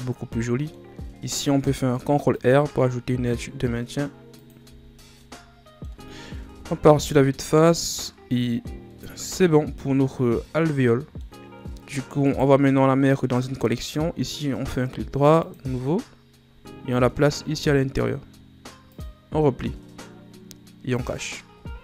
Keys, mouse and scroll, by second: 1.5 ctrl+r, 5.0 scroll down 2, 5.1-6.4 middle drag, 6.4 KP_1, 7.5-8.9 scroll down 4, 8.9-11.5 middle drag, 11.5-12.2 scroll up 4, 12.2 right click, 13.7 click, 14.5-16.9 right drag, 16.9 click, 18.8 click, 20.9 click.